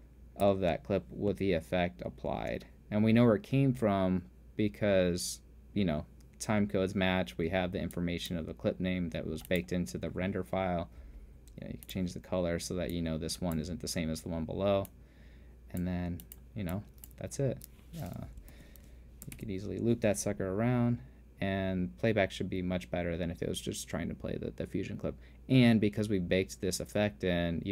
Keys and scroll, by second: 1.1 space, 2.9 space, 17.8 t, 19.1 super+/, 20.2 alt+/.